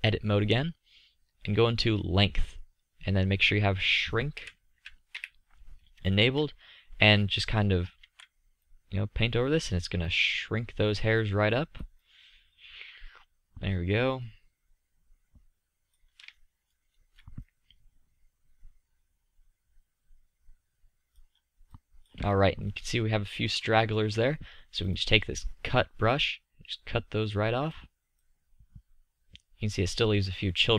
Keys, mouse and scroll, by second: 1.8-3.7 middle drag, 4.5 KP_1, 4.9 KP_3, 5.3 KP_5, 6.6-7.3 middle drag, 8.2 z, 14.0-16.5 middle drag, 16.8-17.6 drag, 22.5 click, 23.3 drag, 26.8-27.6 drag.